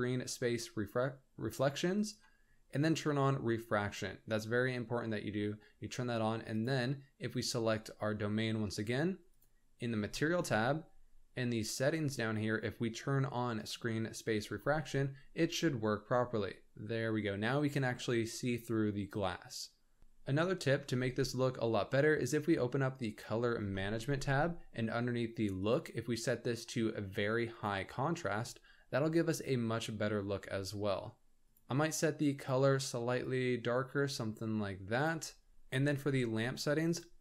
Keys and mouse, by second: 1.9 click, 3.5 click, 6.5 click, 9.3 click, 13.6 click, 14.5-17.5 middle drag, 23.1 click, 25.7-27.8 drag, 28.4-31.4 middle drag, 36.9 click.